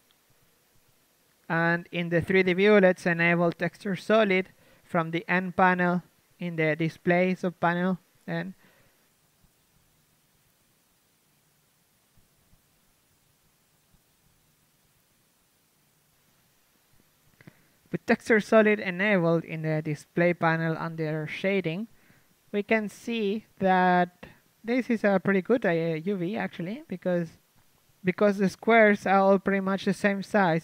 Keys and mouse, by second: 0.8 g, 2.0 ctrl+z, 2.9 a, 4.1 t, 4.4 t, 4.7 n, 6.7-8.2 drag, 8.2 middle click, 8.5 a, 8.7 Tab, 9.0 shift+space, 9.4 KP_1, 9.7 a, 14.1 KP_3, 17.7-24.0 middle drag, 23.0 KP_3, 25.0 Tab, 26.8 ctrl+Tab, 26.8 z, 27.2 a, 30.4-30.6 drag.